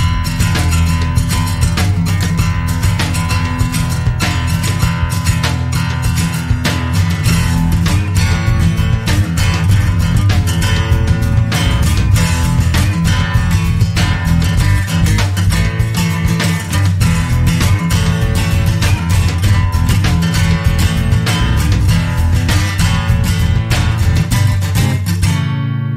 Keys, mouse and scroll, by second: 2.8 click, 6.5 click, 13.3 click, 15.6 click, 17.1 click, 19.1 click, 21.9 click, 23.6-24.6 drag, 25.8 click.